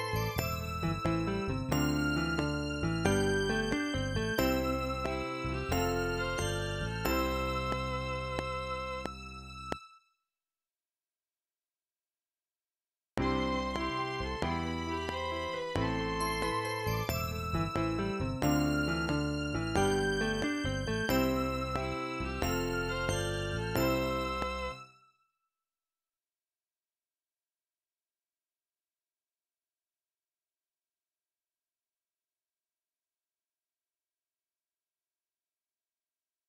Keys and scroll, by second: 10.4 space, 13.1 space, 24.7 space, 26.9 ctrl+s.